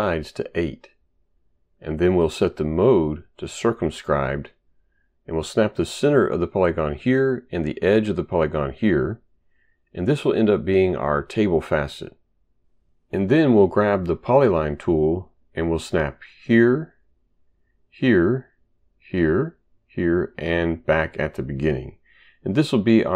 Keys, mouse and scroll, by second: 0.7 Return, 3.8 click, 7.7 click, 9.7 click, 16.3 click, 17.7 click, 18.6 click, 19.5 click, 20.9 click.